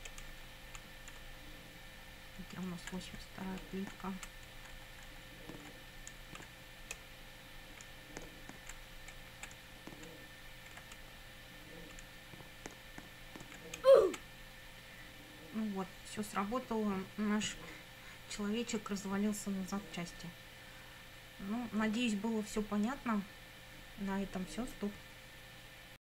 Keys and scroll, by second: 0.7 Left, 2.7 Up, 4.1 Left, 4.5 Up, 7.0 Left, 7.9 Up, 9.2 Right, 9.7 Up, 11.0 Left, 12.2 Up, 13.8 Left.